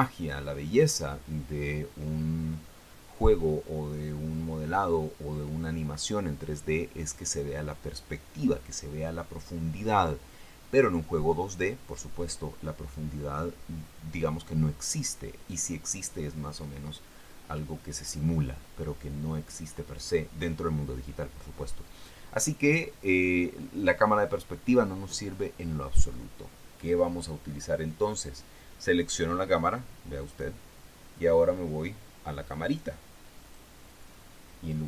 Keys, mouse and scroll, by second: 30.6 right click, 33.8 click.